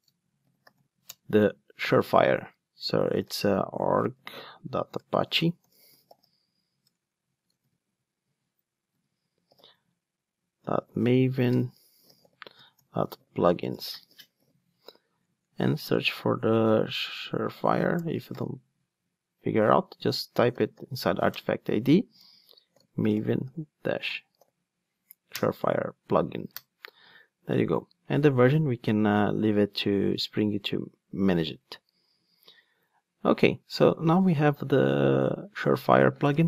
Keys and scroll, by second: 1.1 Return, 21.4 Return, 28.3 Return, 28.4 super+x.